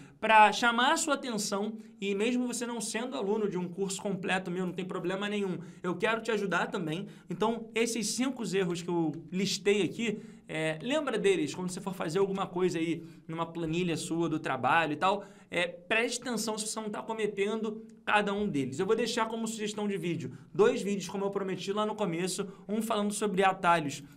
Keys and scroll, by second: 8.1 ctrl+Page_Up, 10.0 ctrl+Page_Down.